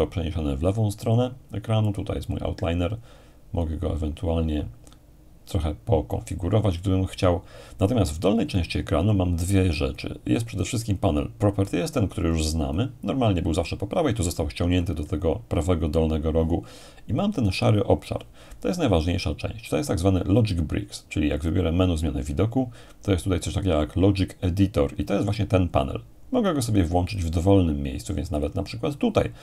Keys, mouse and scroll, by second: 1.9-4.6 drag, 10.6-13.7 drag, 21.4-22.4 drag, 27.1-28.1 drag, 28.4-29.4 drag.